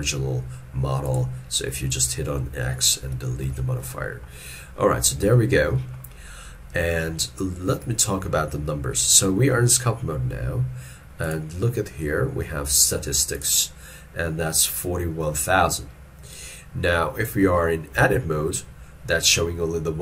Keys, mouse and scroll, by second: 3.6 shift+middle click, 4.0 shift+middle click, 5.4 shift+middle click, 18.1 ctrl+Tab.